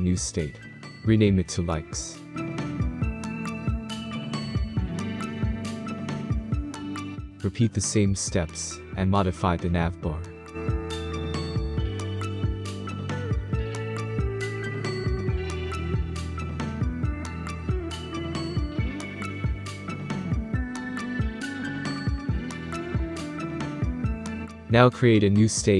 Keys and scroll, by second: 0.8-2.0 typing, 6.4 ctrl+z, 17.0-17.3 Right, 17.7 alt+Right, 18.2 Right, 18.3 Right, 18.5 Right, 18.6 Right.